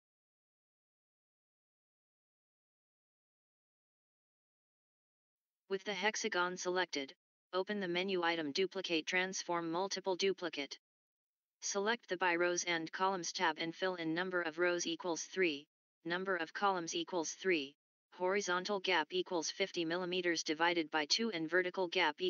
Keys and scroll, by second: 0.1 1, 0.5 Tab.